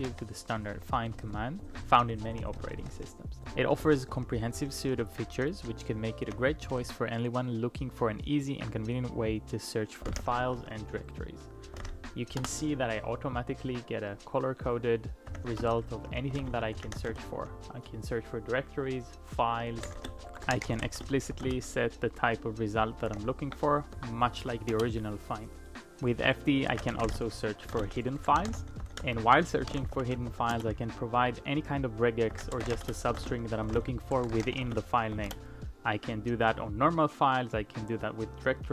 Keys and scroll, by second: 0.1 ctrl+u, 0.6 ctrl+u, 0.8 ctrl+u, 6.0-6.3 typing, 10.2 typing, 11.8-12.1 typing, 12.4 Return, 15.0-21.8 typing, 23.2 ctrl+p, 24.0 BackSpace, 24.3 f, 24.8 Return, 26.5-30.8 typing, 32.1-35.6 typing.